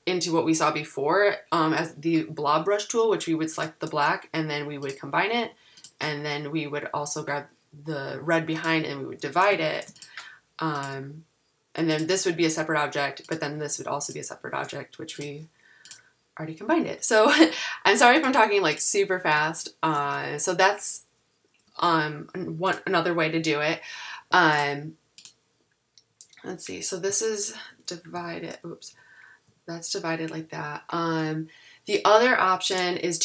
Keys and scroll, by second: 9.7 shift+super+g, 16.8 super+z, 19.4 super+z, 21.7 super+z.